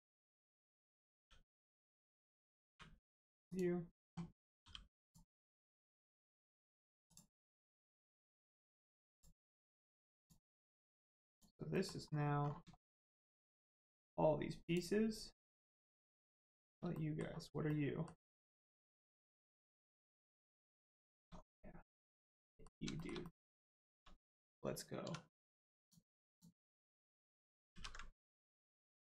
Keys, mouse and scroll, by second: 0.3 right click, 1.1 g, 1.6 right click, 2.6 u, 3.4 click, 4.6 g, 5.0 click, 6.2 middle click, 7.0 click, 7.4 middle click, 8.0 scroll down 1, 8.3 middle click, 8.6-9.1 scroll up 1, 9.1 click, 9.4 middle click, 9.7-10.2 scroll up 1, 10.2 click, 11.7 middle click, 12.1 scroll up 1, 12.7 shift+middle click, 13.6 scroll up 1, 14.6 click, 15.6 middle click, 16.4 shift+middle click, 16.9 middle click, 18.3 shift+middle click, 19.0 middle click, 19.6 shift+middle click, 19.9 scroll up 1, 20.2 shift+middle click, 20.7 middle click, 20.8 middle click, 21.0 shift+middle click, 21.4 scroll up 1, 22.2 click, 22.4 middle click, 23.0 shift+middle click, 23.2 middle click, 23.8 shift+middle click, 25.0 middle click, 25.8 click, 26.2 alt+click, 27.2 ctrl+click, 27.7 ctrl+e.